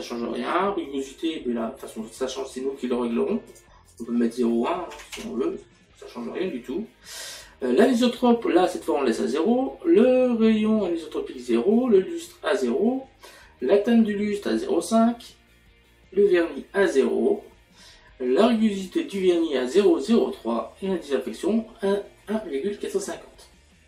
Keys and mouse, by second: 7.3 click.